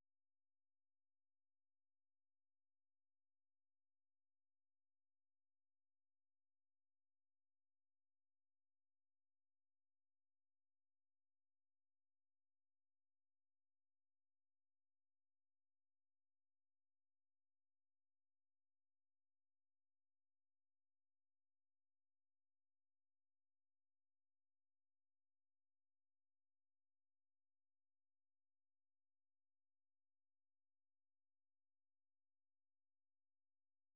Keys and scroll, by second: 0.8 typing, 1.0 Return, 4.4-6.5 typing, 7.7-8.9 typing, 10.4-10.7 typing, 11.1 Return, 17.3 super+2, 21.1 ctrl+c, 21.9 super+1, 22.8 ctrl+v, 23.3 Return, 28.2 super+2, 30.8 ctrl+c, 32.0 super+1, 32.8 ctrl+v, 33.3 Return.